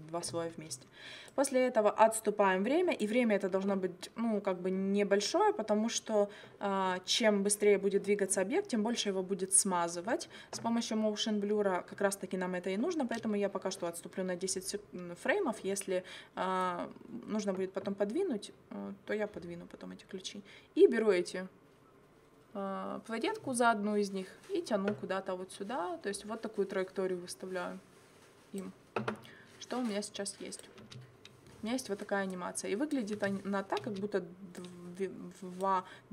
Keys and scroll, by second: 30.9 space, 33.2 space.